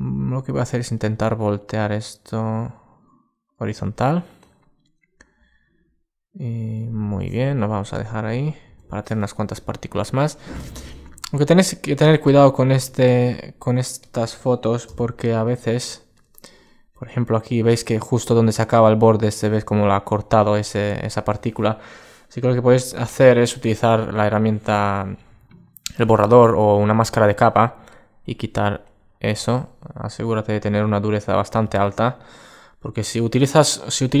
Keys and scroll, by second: 9.4 super+space, 16.2 super+space, 33.4 alt+space.